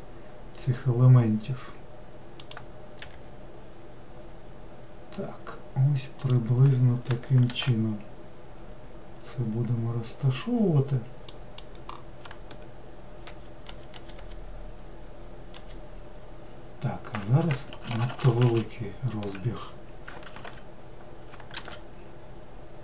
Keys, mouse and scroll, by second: 3.0 g, 7.5 shift+d, 13.3 shift+r, 13.7 shift+r, 14.0 shift+r, 17.7-18.3 ctrl+z, 21.6 shift+d.